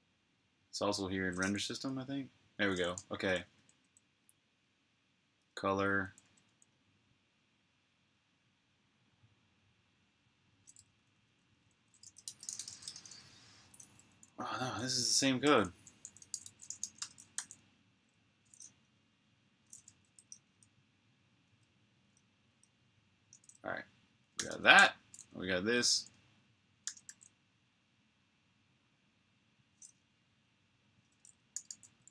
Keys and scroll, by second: 1.5 super+[, 3.6 typing, 6.1 typing, 10.3-12.7 typing, 14.6-16.8 typing, 17.2 super+j, 18.6 super+[, 23.9-26.6 typing, 29.0 typing, 31.1-32.1 typing.